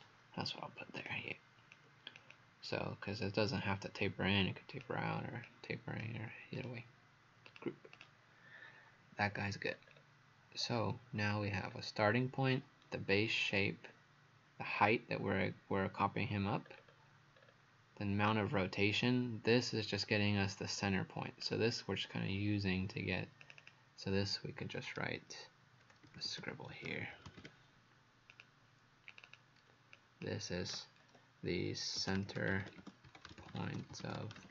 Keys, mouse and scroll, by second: 0.0-0.1 typing, 1.0 click, 2.3 click, 5.5 click, 6.6 right click, 7.5 click, 8.0 click, 9.8-10.1 scroll down 2, 10.8-11.7 scroll down 1, 11.7-12.0 scroll up 2, 16.7-17.3 scroll down 2, 17.4-21.4 scroll down 1, 21.4 click, 23.6 click, 25.9-27.9 typing, 28.3 click, 29.3 click, 31.8-34.5 typing.